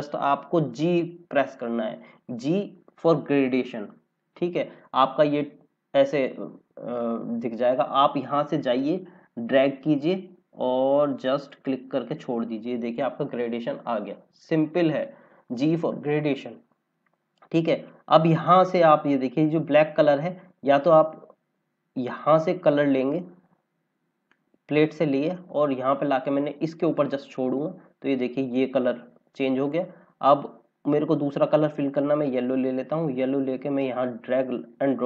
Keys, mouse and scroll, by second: 1.4 g, 8.5 click, 12.8-14.2 scroll up 2, 24.2 click, 32.7 click.